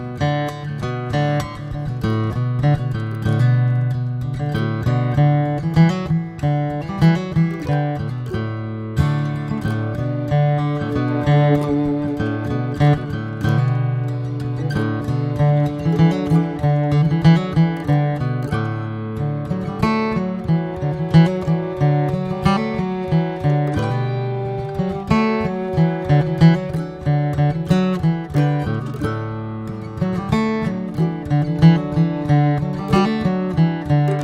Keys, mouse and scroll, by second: 0.4 s, 2.3 click, 2.5 scroll down 2, 2.8-4.5 middle drag, 4.5 scroll up 1, 4.8-7.1 middle drag, 7.1 scroll up 1, 8.2 drag, 8.8 drag, 9.5 click, 10.6 drag, 10.9 alt+middle drag, 11.2 alt+middle drag, 11.5 alt+middle click, 12.2-12.9 middle drag, 13.2 alt+middle click, 13.8 alt+middle click, 14.6 alt+middle click, 15.2 ctrl+s, 15.8-16.4 shift+middle drag, 16.4 click, 16.6 shift+a, 19.3 click, 20.1 s, 21.3 click, 22.3-22.6 scroll up 1, 22.6 shift+middle click, 23.2 s, 24.4 click, 25.3-26.7 scroll down 1, 26.7 click, 27.5 click, 28.1 Delete, 28.3 click, 28.6 scroll down 2, 28.8-29.4 middle drag, 29.4 shift+scroll up 2, 29.7 click, 29.9 shift+a, 32.3 middle click, 32.6 F4.